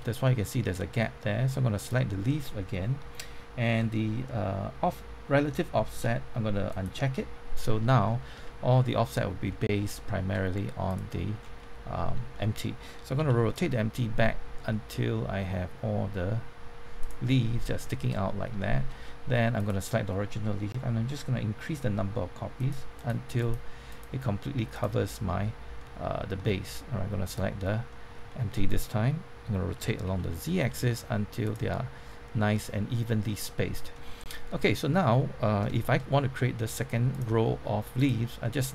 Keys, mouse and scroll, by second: 1.7 click, 7.6 scroll up 1, 8.0 middle click, 8.4 shift+middle click, 9.9 shift+middle click, 10.8 click, 11.3 scroll down 1, 11.5-12.7 middle drag, 12.9-14.1 typing, 17.0 click, 17.2 middle click, 17.8 shift+middle click, 18.5 shift+middle click, 19.5-25.7 drag, 25.7 middle click, 26.3-27.2 scroll up 1, 27.2 click, 27.9 middle click, 29.7-30.1 typing, 31.4 click, 31.7-33.7 middle drag, 33.9 scroll down 1, 34.1 middle click, 35.7-36.7 shift+middle drag, 37.1 click.